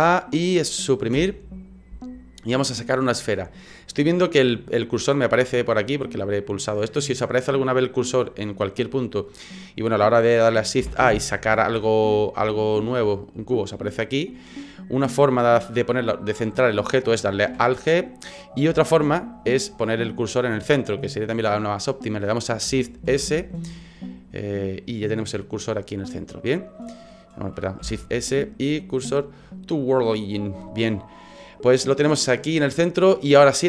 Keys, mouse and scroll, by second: 0.0 a, 1.1 Delete, 5.5 click, 6.1 click, 6.5 click, 6.9 click, 7.3 click, 7.7 click, 8.0 click, 8.5 click, 10.8 shift+a, 13.7 middle click, 17.5 alt+g, 18.1 right click, 18.7 Delete, 20.1 middle click, 23.0 shift+s, 26.4 middle click, 27.8 shift+s.